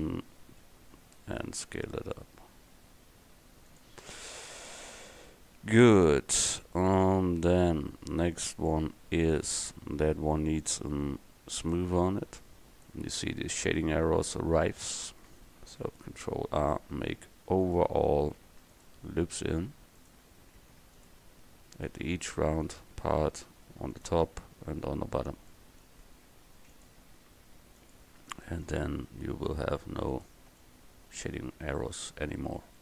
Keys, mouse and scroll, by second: 0.9 s, 8.0 Tab, 13.7 Tab, 15.9 ctrl+r, 18.5 ctrl+r, 20.7 ctrl+r, 22.5 ctrl+r, 26.4 ctrl+r, 28.5 ctrl+r, 31.5 Tab.